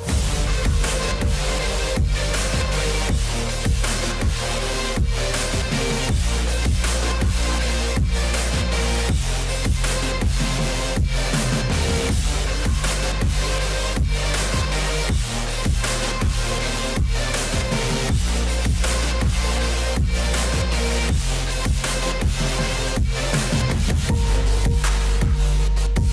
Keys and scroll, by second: 3.4 ctrl+a.